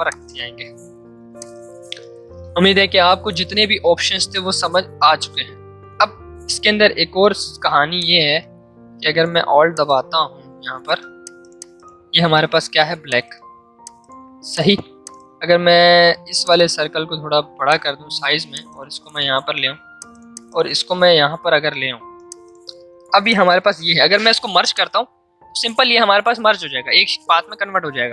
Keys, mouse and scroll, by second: 7.1 l, 8.0 shift+click, 8.8 v, 9.7-15.9 alt+drag, 15.9 v, 16.4 click, 18.5-22.3 drag, 27.2 ctrl+z.